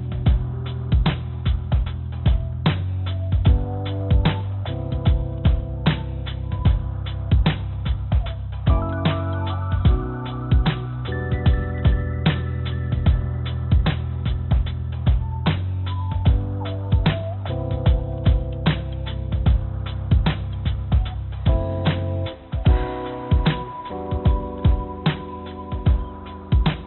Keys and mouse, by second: 20.4 ctrl+j, 24.9 click, 25.7 click, 26.5 click.